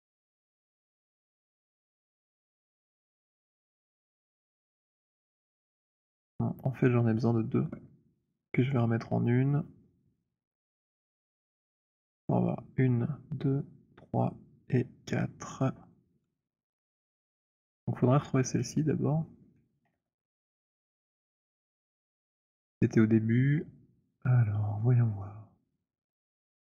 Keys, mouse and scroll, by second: 0.3 middle click, 0.5 alt+click, 3.6 shift+click, 4.8 alt+click, 18.7 click, 19.9 ctrl+h, 22.2-24.6 scroll, 25.9 click.